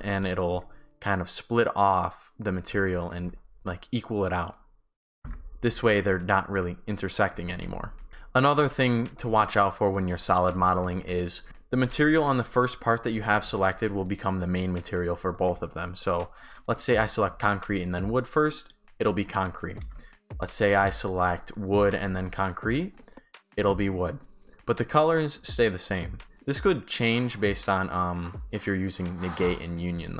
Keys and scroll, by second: 0.0-0.7 typing, 2.8 shift+s, 5.2 shift+s, 5.2 Pause, 5.9 shift+w, 7.4 shift+s, 8.1 Pause, 8.9 shift+a, 9.2 shift+d, 10.3 shift+d, 11.5 Pause, 13.2 shift+w, 13.5 shift+s.